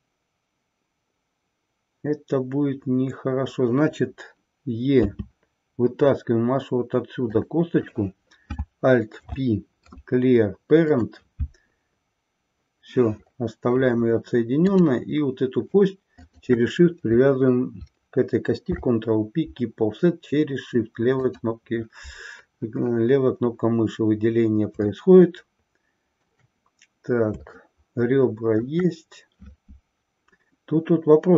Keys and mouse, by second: 7.4 click, 7.9 click, 9.2 alt+p, 14.6 click, 16.2 shift+click, 18.6 ctrl+p, 25.2-26.4 shift+middle drag, 27.6-28.8 shift+middle drag.